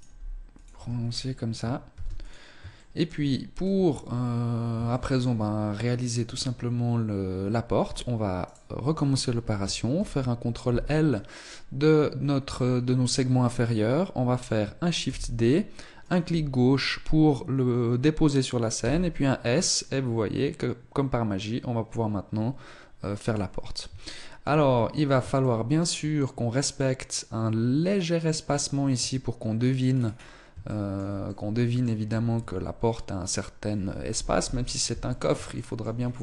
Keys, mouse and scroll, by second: 0.7 Tab, 0.8 scroll down 4, 1.6 ctrl+s, 2.7 shift+middle click, 3.0-4.2 scroll up 2, 4.2 scroll up 1, 4.2 shift+middle click, 5.9 Tab, 8.3 right click, 9.8 ctrl+l, 14.9 shift+d, 18.6 s, 23.9 shift+middle click, 24.1-25.0 scroll up 5, 25.2 shift+middle click, 28.8 Tab, 29.7-30.4 scroll down 6, 30.4 shift+middle click, 31.0 middle click, 31.9-32.2 scroll up 2, 32.2 Tab, 34.2 KP_1, 35.4 shift+middle click, 35.8-36.2 scroll up 3.